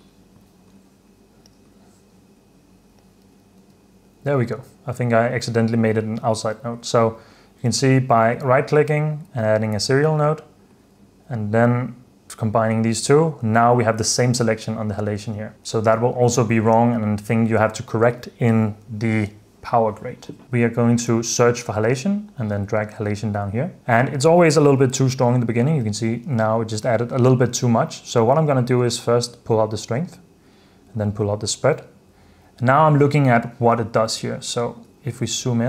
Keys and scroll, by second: 3.7 h, 15.3 h, 26.0 super+d, 35.2 super+f.